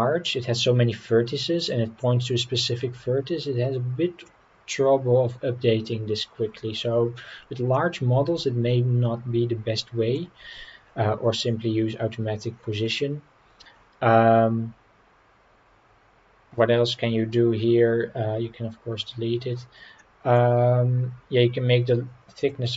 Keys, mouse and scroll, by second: 1.1-4.2 middle drag, 6.3-7.2 scroll up 3, 7.2 scroll down 2, 7.7-10.1 middle drag, 10.4 scroll up 2, 12.9-13.6 middle drag, 20.0 middle click, 22.4 click.